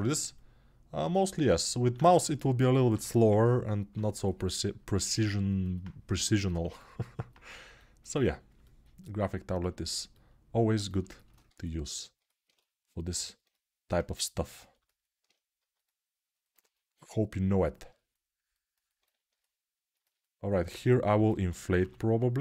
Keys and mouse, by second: 2.7 6, 5.9 g, 11.2 1.